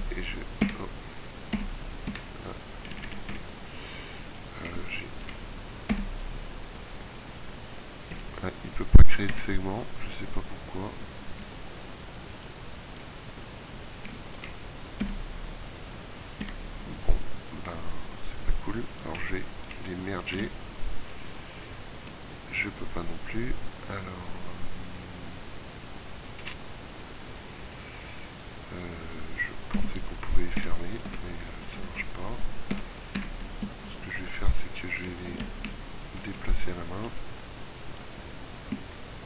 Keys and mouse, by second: 1.6 f, 3.0-3.4 a, 5.7 f, 9.2 KP_Decimal, 11.5 z, 15.2 f, 16.8-18.1 middle drag, 19.0-20.2 middle drag, 20.2 w, 29.6 f, 31.2 Tab, 31.8 z, 32.8 Tab, 33.4 a, 35.4 ctrl+KP_7, 36.2 z, 37.0 z.